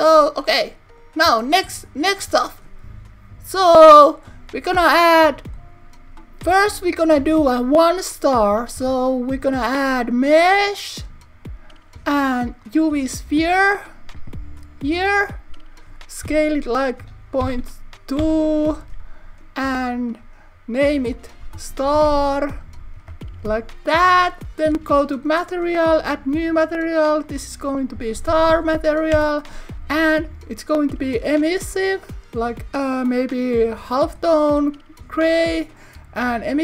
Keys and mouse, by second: 2.1-4.5 shift+middle drag, 5.4 click, 8.1 click, 8.8 shift+a, 14.9 click, 16.3 s, 17.4 ., 17.5 2, 18.2 Return, 21.1 click, 25.1 click, 27.4-29.6 drag, 31.1 click.